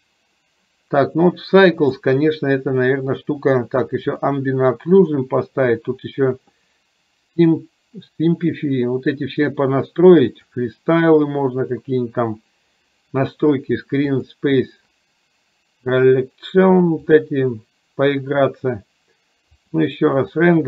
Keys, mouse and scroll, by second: 7.6 click, 10.5 click, 14.3 click, 17.3-18.5 drag, 19.8 click.